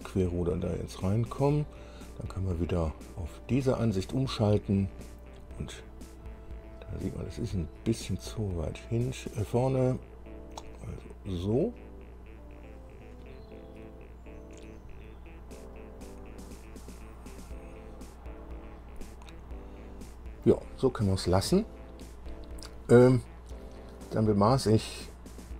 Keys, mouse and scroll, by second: 3.7 click, 6.4 scroll up 1, 8.3-13.2 drag, 13.4-20.8 middle drag.